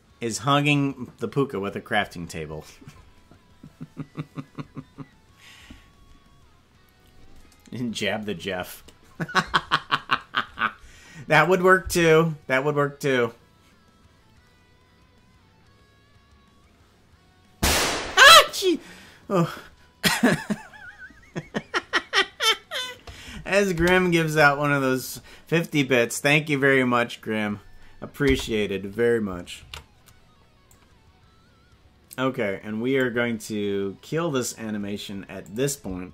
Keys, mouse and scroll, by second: 11.4 click, 11.7 space, 23.8 space, 28.3 space, 29.7 ctrl+s, 30.7-33.0 drag, 35.4-36.1 drag.